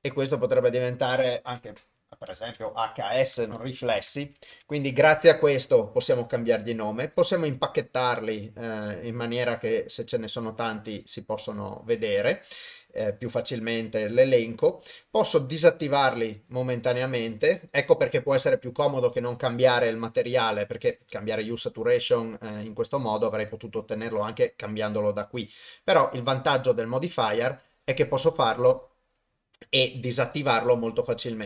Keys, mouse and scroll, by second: 0.6-4.6 drag, 4.3 s, 8.1 drag, 11.0 drag, 11.5 click, 15.7 click, 16.4 click, 16.9 click, 17.4 click, 23.5 click, 26.2 click, 27.5 click, 27.9 click, 29.9 click, 30.2 click.